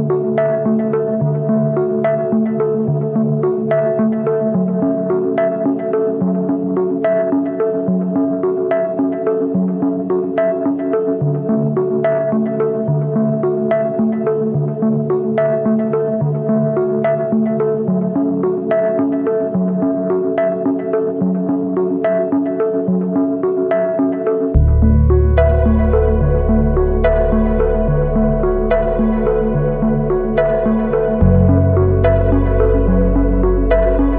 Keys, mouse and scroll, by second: 15.6 double click.